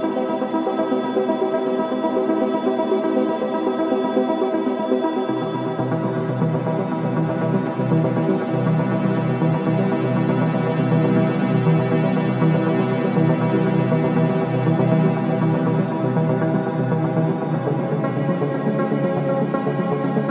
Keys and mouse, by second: 8.2 click, 13.3 click, 15.7 r.